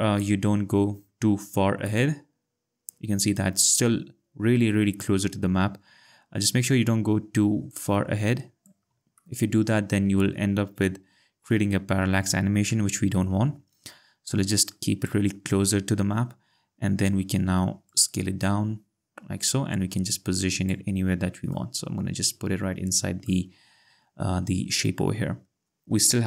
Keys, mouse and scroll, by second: 1.9 alt+click, 6.2 alt+click, 7.7 alt+click, 9.2 alt+click, 12.0 alt+click, 13.2 ctrl+z, 17.9 click, 21.5 click, 25.8 click.